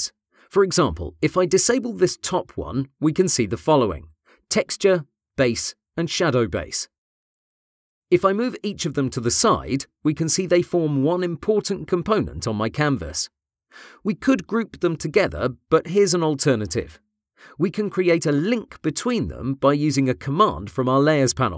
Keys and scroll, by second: 8.0 ctrl+z.